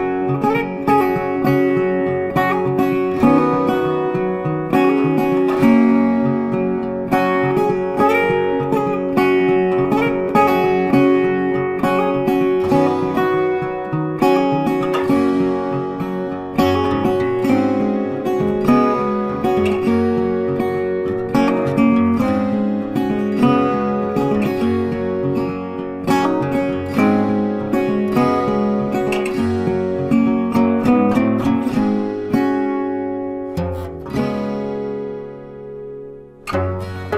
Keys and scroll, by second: 25.3 ctrl+t.